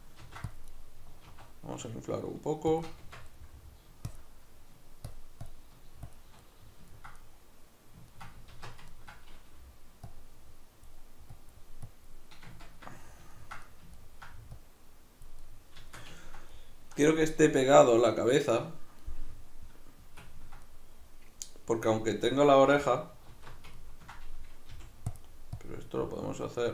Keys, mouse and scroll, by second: 0.2 ctrl+r, 0.8 right click, 1.2 alt+s, 2.8 shift+click, 3.0 Tab, 3.4 middle click, 4.1-6.4 shift+drag, 6.4-10.1 middle drag, 8.5 alt+q, 10.1-12.5 drag, 12.5-14.5 ctrl+middle drag, 14.5 click, 15.4-25.2 middle drag, 23.3 alt+q, 24.7 f, 25.2 click.